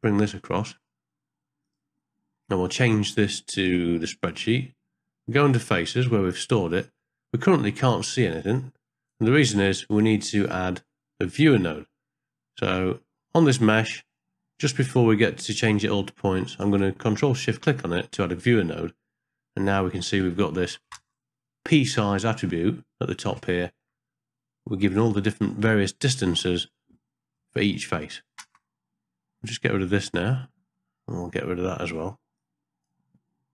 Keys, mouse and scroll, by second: 0.0 click, 1.8-4.3 drag, 6.7 middle click, 8.5 click, 11.4 middle click, 11.4-11.7 scroll up 1, 12.8 middle click, 15.7 click, 17.5 ctrl+shift+click, 21.0 ctrl+space, 28.5 ctrl+space, 29.2 click, 29.8 click, 30.4 x, 32.4 click.